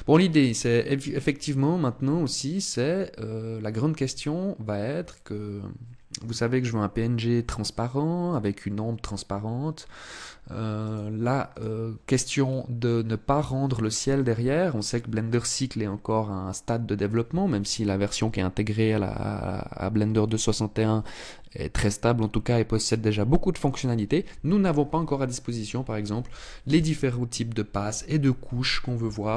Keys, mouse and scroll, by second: 10.4 click, 11.2 click, 12.0-12.6 scroll down 2.